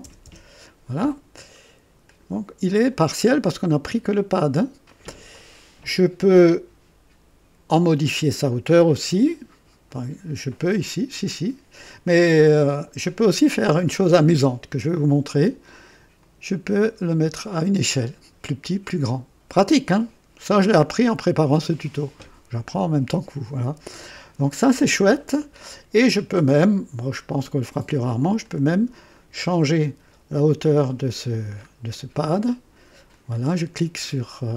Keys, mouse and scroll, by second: 0.0 KP_0, 2.0 click, 2.7 click, 2.7 typing, 9.8 click, 12.8 scroll down 1, 16.2 click, 16.9 scroll up 2, 24.3 scroll down 2, 27.3-28.6 drag, 29.1 click, 29.8-30.7 scroll down 4, 31.3 scroll down 2, 33.1 click.